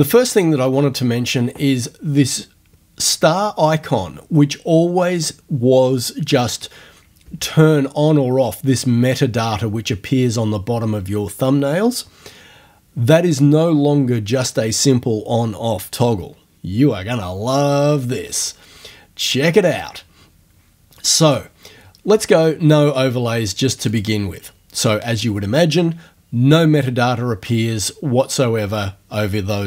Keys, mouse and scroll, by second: 18.4 click, 23.9 click.